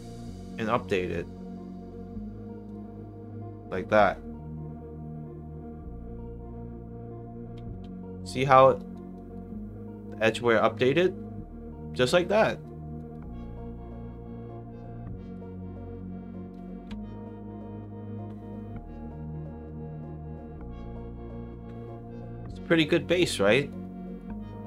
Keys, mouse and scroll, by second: 2.6 click, 7.9 alt+click, 8.4 alt+middle click, 8.7 alt+right click, 9.1 alt+click, 10.0 alt+click, 10.4 alt+middle click, 10.7 alt+right click, 10.9-12.4 alt+drag, 12.6 alt+right click, 13.0 alt+click, 13.7 alt+middle click, 14.3 alt+click, 15.8 alt+right click, 17.6 middle click, 17.6 scroll down 1, 18.7 scroll down 2, 19.1 middle drag, 19.9 middle drag, 20.7 middle drag, 21.3 middle drag, 22.2-22.5 drag, 23.3 alt+right click, 23.7 alt+click, 24.3 alt+middle click.